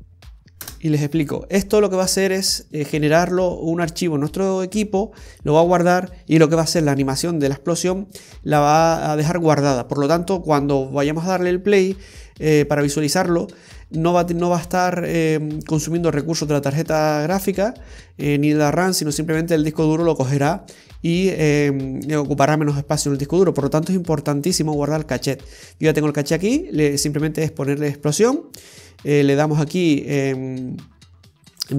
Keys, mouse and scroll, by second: 26.6-29.6 scroll down 3, 30.6-31.5 scroll down 1, 31.5 click, 31.5 scroll down 2.